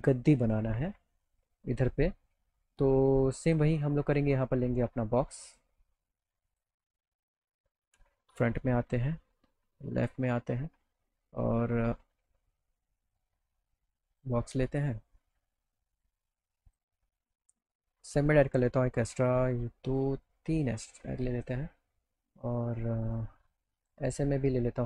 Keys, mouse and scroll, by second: 0.7 click, 3.5 click, 5.5 click, 6.5 click, 11.0 click, 12.5-14.1 drag, 14.1 right click, 14.7 right click, 15.2 middle click, 16.7 click, 18.1 click, 19.9 click, 20.4 click.